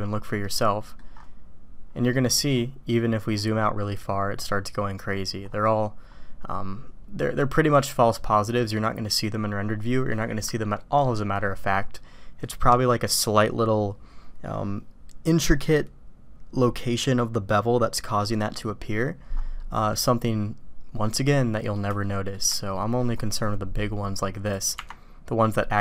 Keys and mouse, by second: 0.4-1.0 middle drag, 19.7-21.1 drag, 21.9-22.3 shift+drag, 22.7 click, 24.4 click.